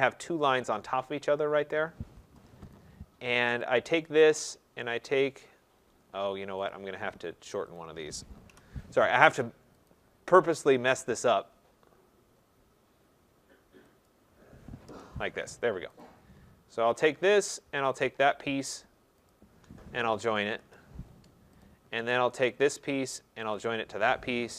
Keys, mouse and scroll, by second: 0.5 click, 1.7 click, 2.2 Return, 2.7 click, 3.6 click, 6.7 click, 7.7 click, 8.5 Delete, 9.8 click, 11.0 click, 14.0 click, 14.8 Return, 16.0 click, 17.0 click, 17.9 shift+click, 19.2 shift+click, 23.5 click.